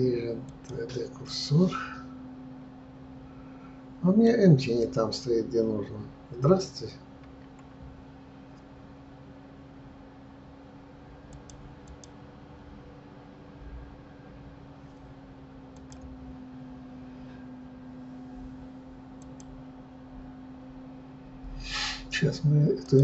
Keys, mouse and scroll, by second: 0.6 click, 1.3-4.3 middle drag, 11.4-19.4 drag, 22.7 click.